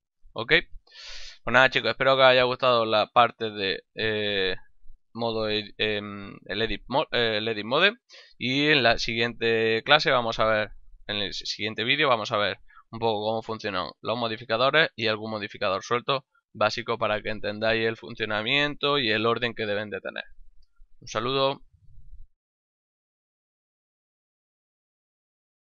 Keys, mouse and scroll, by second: 0.3 ctrl+middle click, 1.0 shift+middle click, 1.4 ctrl+middle click, 1.9 shift+middle click, 12.5 click, 15.8 click.